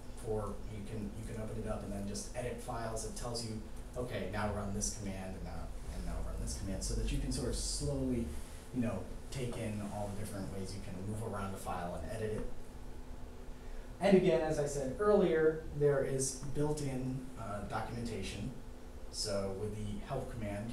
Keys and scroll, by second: 13.9 typing.